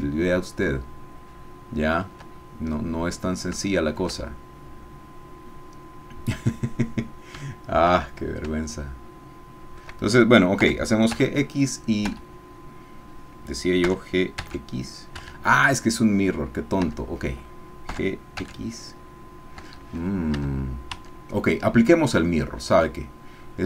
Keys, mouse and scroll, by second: 2.7-3.2 scroll up 2, 3.2 scroll up 1, 3.3 scroll down 2, 3.6-5.8 shift+middle drag, 5.8-7.3 drag, 7.3 shift+middle click, 8.1-8.6 shift+scroll up 4, 8.6-9.9 shift+middle drag, 10.6 g, 11.1 x, 12.1 Escape, 13.8 g, 14.4 x, 15.1 Escape, 16.8 Tab, 17.9 g, 18.4 x, 19.6 Escape, 20.4 Tab.